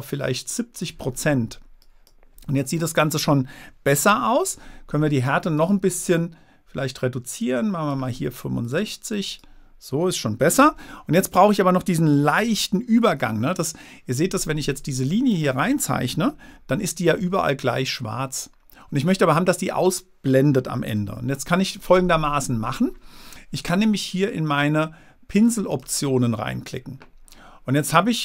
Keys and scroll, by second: 4.3 super+z, 10.9 super+z, 12.8 super+z, 21.3 super+z.